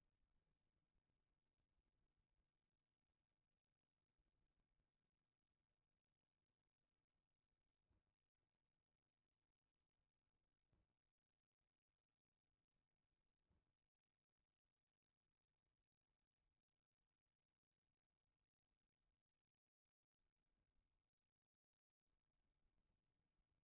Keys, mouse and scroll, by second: 3.3 click, 7.0 click, 8.0-8.6 drag, 9.4 Tab, 9.8-10.9 middle drag, 12.2 ctrl+middle click, 13.4 shift+middle click, 13.9 a, 14.6 Tab, 17.9 click, 19.4-20.3 middle drag, 21.1-21.5 shift+drag, 22.6-23.6 drag.